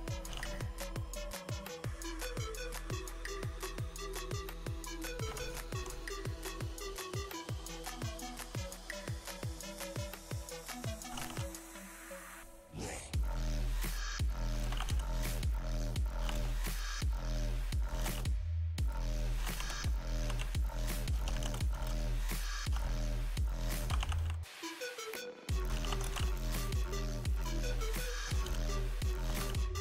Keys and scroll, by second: 0.0-3.1 typing, 4.9 Return, 5.1 r, 5.7 t, 7.5-9.7 typing, 10.3 Return, 10.7-12.7 typing, 14.2 c, 14.6 space, 15.0 s, 16.3-29.8 typing.